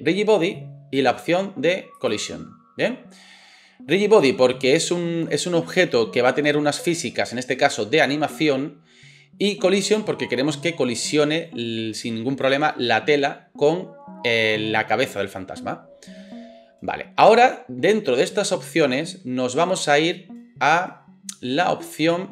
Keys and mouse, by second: 0.3-22.3 drag.